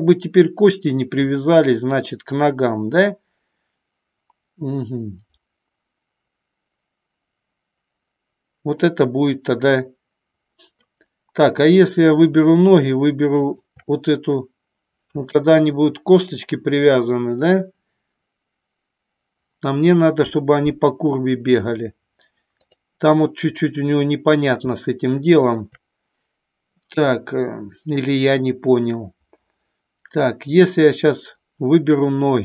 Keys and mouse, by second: 13.5 shift+click, 22.7 click.